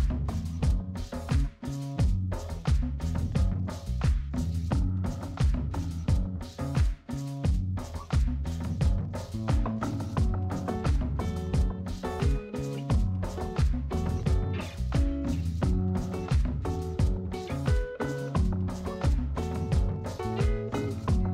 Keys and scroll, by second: 0.7-2.9 typing, 4.7 1, 15.2 space.